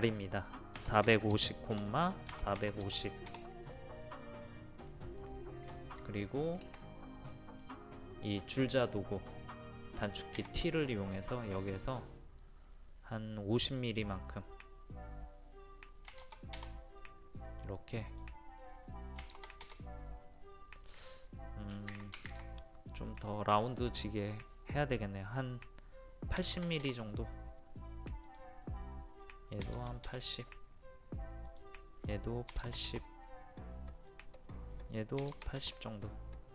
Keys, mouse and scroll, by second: 0.8-2.8 typing, 4.3 middle click, 5.2 scroll up 1, 5.7 middle click, 6.2-6.7 scroll up 1, 7.3-10.9 middle drag, 10.4 t, 11.0 click, 16.1 KP_5, 16.2 KP_0, 18.1 click, 19.2 KP_5, 19.3 KP_0, 21.9 ctrl+z, 22.3 ctrl+z, 23.2 click, 26.4 KP_8, 26.5 KP_0, 28.3 click, 29.6 KP_8, 29.8 KP_0, 31.5 click, 32.5 KP_8, 32.6 KP_0, 34.1 click, 35.2 KP_8, 35.3 KP_0.